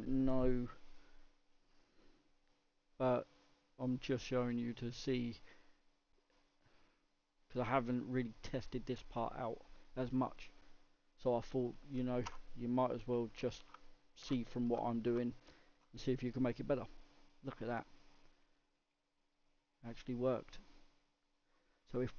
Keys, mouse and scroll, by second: 16.9-17.7 scroll up 5, 17.7-18.5 middle drag, 18.5-18.9 scroll down 3, 18.9-20.1 middle drag, 20.1-21.6 scroll down 2, 21.6 middle click, 21.7-22.1 scroll up 1.